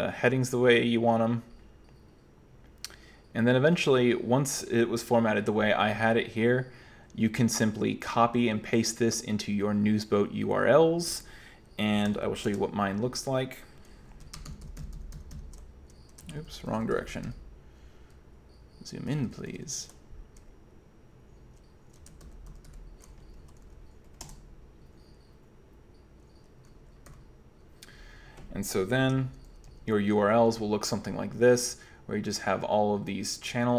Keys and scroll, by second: 12.1 super+9, 12.5 super+Return, 14.5 alt+j, 14.7 alt+j, 14.8 alt+j, 15.0 alt+j, 15.2 alt+j, 15.4 alt+j, 16.3 alt+k, 16.6 alt+k, 23.7-24.3 alt+k, 27.1 o, 29.3 alt+j, 29.5 alt+j, 29.7 alt+j, 30.4 alt+j, 32.5 typing.